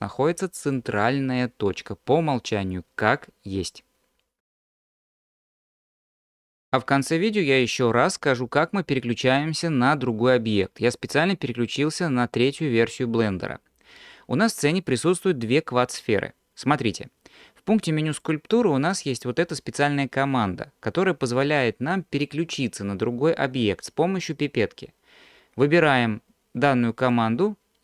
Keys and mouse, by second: 18.1-27.8 drag.